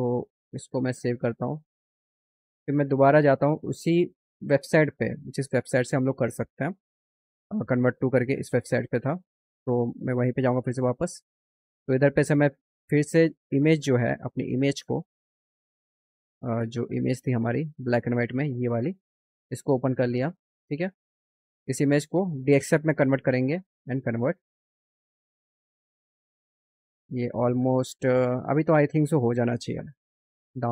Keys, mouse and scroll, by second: 4.7 click, 9.5 click, 13.5 click, 17.2 click, 17.7 click, 18.9 click, 23.4 click.